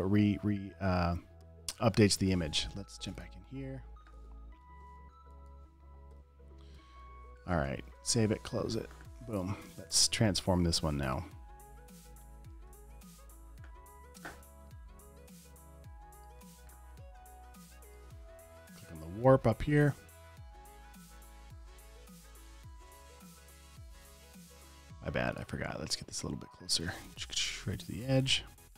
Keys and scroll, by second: 5.0 i, 6.5 alt+BackSpace, 7.2 v, 7.4 super+s, 8.4 super+w, 13.0 super+t, 17.8 space, 22.8 super+z, 23.3 super+z, 24.4 super+z, 28.0 space.